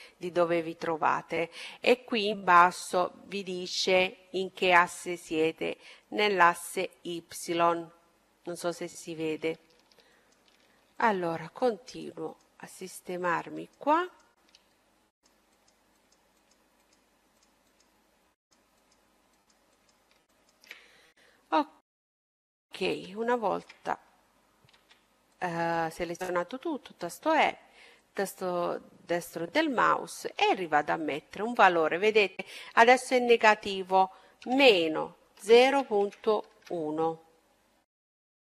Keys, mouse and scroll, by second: 9.7-22.4 right drag, 14.2-15.9 middle drag, 21.5-24.2 middle drag, 23.8 e, 26.9-28.8 drag, 29.7-31.5 drag, 37.3-38.5 middle drag.